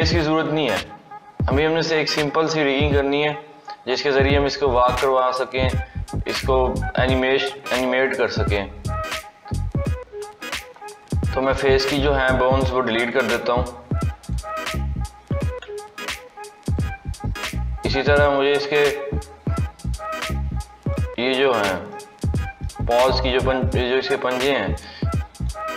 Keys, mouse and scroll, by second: 11.4-12.8 drag, 12.8-13.8 scroll down 1, 14.1 click, 15.3 x, 17.6-18.6 scroll up 2, 18.6 click, 19.7 click, 20.8-23.7 middle drag, 23.7-24.2 scroll up 2, 24.2-25.6 middle drag, 25.6-25.7 scroll up 1.